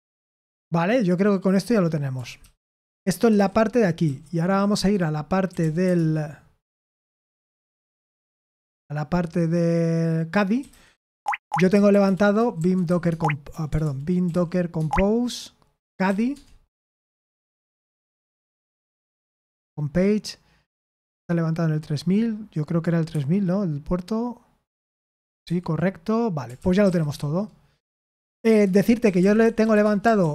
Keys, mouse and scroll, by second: 2.3-4.0 typing, 4.7 Return, 5.2-6.3 typing, 10.3-16.0 typing, 13.0 Tab, 16.3 Tab, 16.7 Return, 23.0 super+8, 25.4 super+7, 26.3-27.5 typing, 28.6 Return, 28.7-30.3 typing.